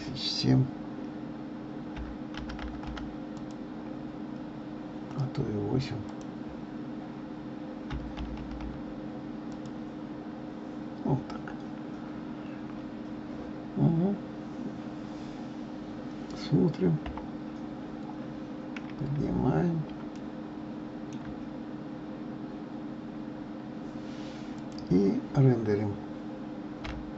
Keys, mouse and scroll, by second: 2.7 0, 6.2-8.5 drag, 8.5 9, 17.2 KP_0, 18.4-18.9 scroll up 4, 19.6-19.9 scroll down 2, 20.3-21.6 shift+middle drag, 21.6-21.9 scroll up 2, 24.7 click, 27.1 F12.